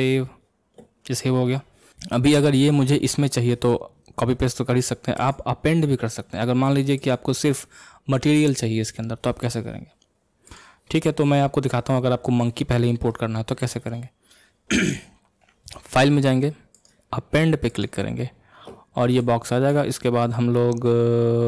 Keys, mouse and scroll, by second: 0.0 ctrl+s, 7.0 click.